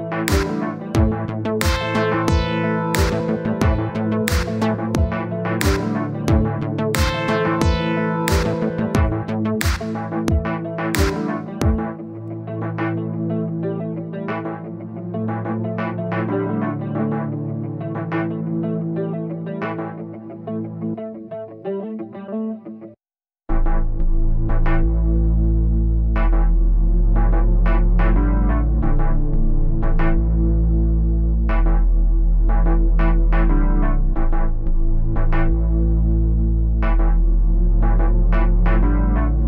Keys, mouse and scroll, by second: 0.1 middle click, 0.6-1.8 drag, 2.3-3.6 drag, 4.6-5.8 middle drag, 6.8-9.5 drag, 9.5 scroll down 2, 9.6-10.1 scroll up 2, 10.1-11.3 drag, 11.4-13.4 drag, 15.1 click, 15.8 click, 16.1-17.3 middle drag, 18.4-24.0 drag, 24.8-27.3 drag, 27.6 scroll down 3, 27.7 middle click, 28.6-31.7 drag, 31.7 scroll up 2, 31.8 middle click, 32.2-33.9 drag, 33.9 middle click, 34.6 click, 35.4 click, 35.8 middle click, 36.2-37.5 drag, 37.5-38.7 middle drag, 39.1-39.4 scroll down 10.